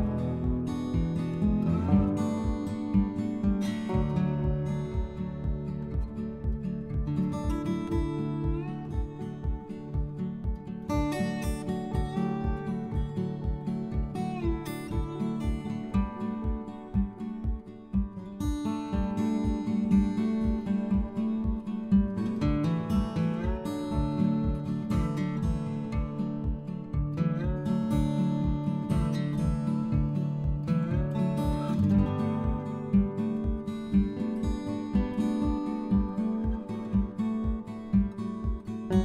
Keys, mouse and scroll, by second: 3.3 click, 4.2 click, 5.6 click, 7.0 click, 7.5 middle click.